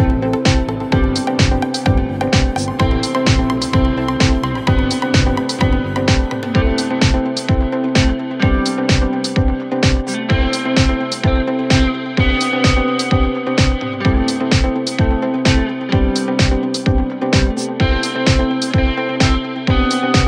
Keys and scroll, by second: 1.8 9, 1.9 Return, 4.1 3, 7.8 ctrl+z.